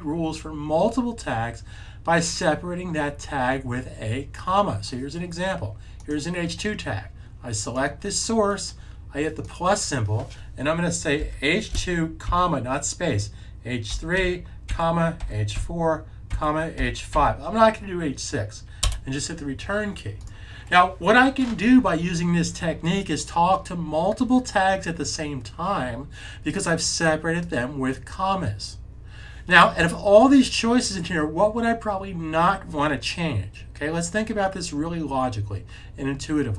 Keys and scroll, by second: 11.1-12.1 typing, 13.8-17.0 typing.